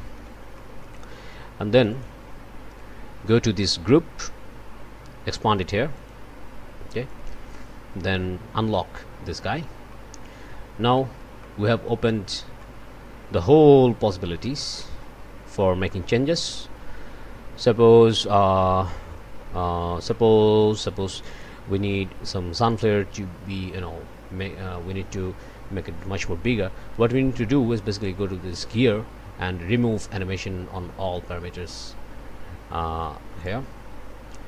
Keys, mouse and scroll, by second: 0.1 o, 0.6 click, 1.7 click, 5.9 click, 7.1 click, 9.2 click, 9.9 click, 10.6 click, 12.1 click, 15.3 click, 15.6 click, 15.9 click, 18.5 scroll up 1, 19.2 scroll down 1, 20.1 click, 21.1 click, 27.9 click, 33.4 click.